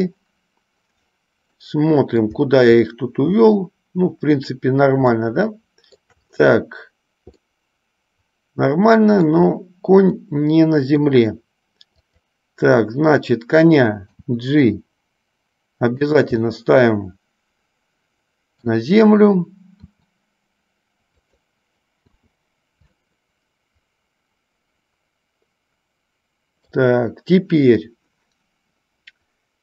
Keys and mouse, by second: 1.8 middle click, 5.4-6.3 shift+middle drag, 7.7-9.5 middle drag, 10.5 middle click, 12.3 click, 14.2 g, 16.7-18.9 middle drag, 20.0 r, 22.4 i, 23.3-26.9 middle drag.